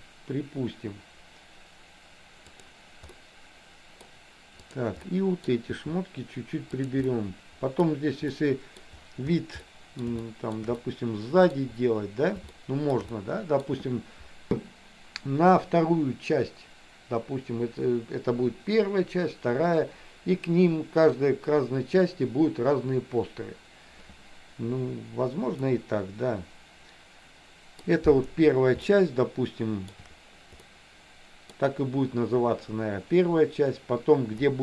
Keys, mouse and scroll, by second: 3.3 middle click, 4.6 click, 5.0 middle click, 5.9 r, 7.0 middle click, 7.9-8.4 scroll down 1, 8.4 middle click, 9.8 middle click, 10.3 shift+middle click, 10.6 scroll down 1, 10.8 middle click, 12.5 shift+middle click, 13.3 middle click, 25.8-27.9 middle drag, 29.0-30.1 shift+middle drag, 30.8 middle click.